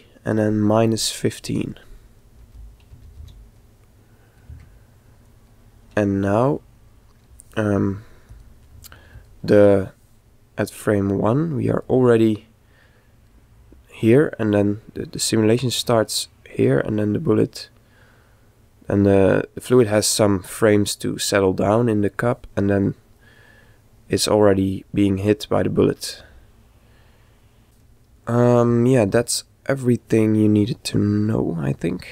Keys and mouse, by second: 9.2 click, 10.7 click, 13.0-14.8 middle drag, 15.2 click, 21.2-23.0 middle drag, 23.3 click, 30.2-32.1 middle drag.